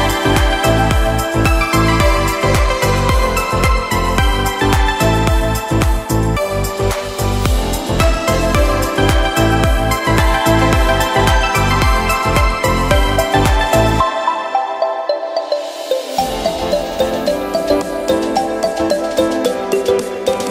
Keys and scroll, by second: 11.8 v, 13.5 super+j, 19.2 b.